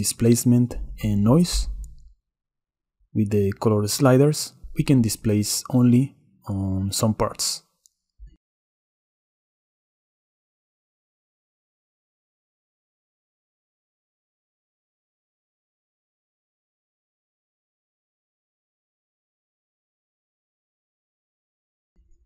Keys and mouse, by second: 5.6 drag, 6.2 middle click, 6.5 click, 6.8 middle click, 7.0 click, 7.3 click, 8.3-8.7 shift+middle drag, 9.1-9.5 middle drag, 9.6 shift+click, 12.7 click, 13.8-14.2 shift+drag, 14.2 shift+middle click, 17.7 click, 20.8 click.